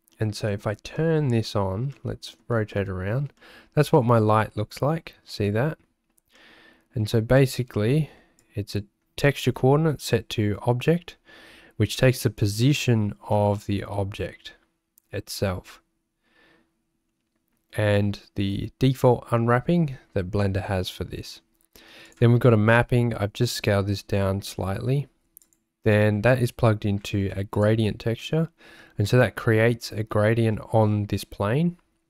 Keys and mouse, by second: 1.1 middle click, 1.9 middle click, 2.8 shift+click, 2.9 shift+middle click, 3.4 middle click, 6.4 shift+middle click, 8.5 click, 22.1-25.5 drag, 27.5 ctrl+shift+click.